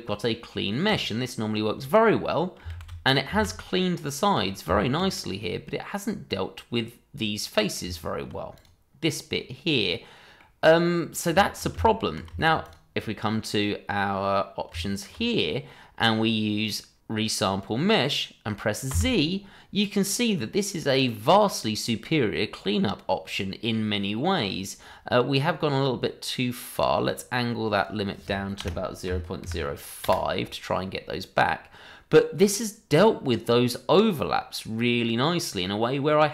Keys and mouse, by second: 2.3-2.6 middle drag, 2.7 shift+z, 3.7-4.2 middle drag, 4.6 Tab, 6.2-7.7 middle drag, 7.8 Tab, 8.5 click, 9.3-10.4 middle drag, 10.9 middle drag, 11.4 shift+middle drag, 11.7 Tab, 12.3 shift+middle drag, 12.6 click, 13.0 middle drag, 15.7-16.6 middle drag, 18.9 z, 19.9-24.3 middle drag, 27.0-30.0 drag, 31.0-32.3 middle drag, 34.2-36.1 middle drag.